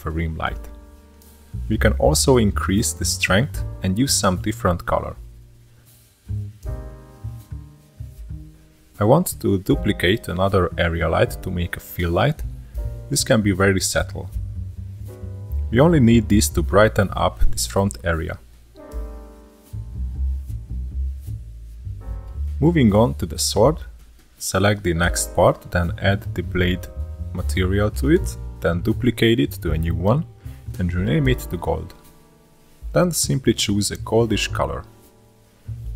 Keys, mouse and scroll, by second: 2.8 scroll up 1, 3.0-4.4 drag, 4.4 KP_0, 5.9 click, 8.9 middle click, 9.4 shift+d, 11.3 r, 15.7-17.2 drag, 17.2 KP_0, 19.3 click, 22.1 drag, 22.4-25.0 middle drag, 25.0-27.2 drag, 27.2-28.7 middle drag, 28.7-32.2 drag, 32.2-33.0 middle drag, 33.0-34.4 drag.